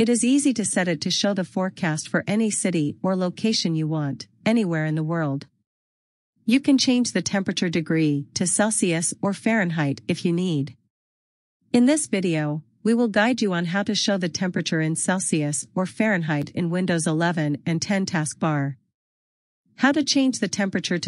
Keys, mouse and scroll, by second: 3.0 scroll down 1, 7.7 scroll down 1, 15.8 click.